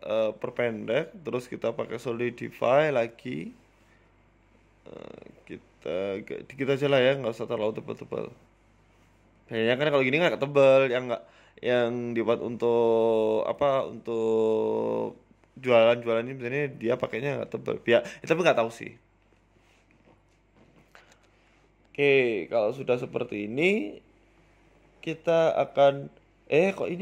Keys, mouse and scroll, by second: 2.1 click, 3.6 scroll down 4, 4.4 shift+click, 5.8 Tab, 6.7 shift+click, 8.7 middle click, 9.0 scroll down 4, 9.4 KP_7, 9.9 s, 10.4 scroll up 3, 10.6 shift+middle click, 11.0 right click, 11.2 shift+s, 13.1 shift+s, 14.2 right click, 14.8 shift+s, 15.7 s, 16.5 middle click, 16.9-17.4 scroll up 5, 17.0 shift+middle click, 17.8 g, 21.5 scroll up 3, 21.7 shift+middle click, 21.9 middle click, 22.2 scroll up 2, 22.5 shift+middle click, 23.8 right click, 24.3 w, 25.0 scroll down 2, 25.2 middle click, 25.6-26.8 scroll down 7, 25.8 middle click, 26.4 middle click, 26.9 middle click.